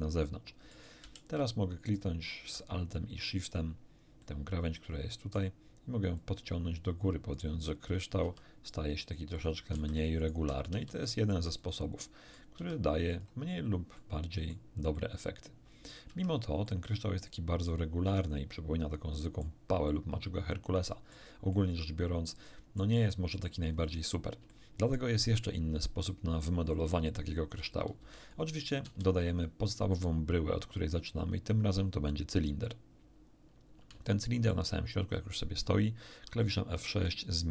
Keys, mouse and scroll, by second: 1.1 a, 1.8 alt+shift+right click, 4.1-5.5 middle drag, 6.1-7.5 drag, 8.2 r, 9.3 click, 9.7 a, 10.1 alt+shift+right click, 10.2 alt+shift+click, 10.8 alt+shift+r, 11.5 alt+shift+click, 11.9 middle click, 12.5 r, 13.1 click, 13.9 middle click, 14.9-16.1 middle drag, 16.0 Tab, 16.4 scroll down 1, 16.6-19.5 middle drag, 19.8-21.3 middle drag, 21.5-22.9 middle drag, 23.1 middle click, 24.4 shift+scroll up 2, 24.5 shift+middle click, 27.9 x, 28.1 click, 28.3 click, 28.8 shift+a, 32.6 click, 34.0-34.7 shift+middle drag, 36.9 F6.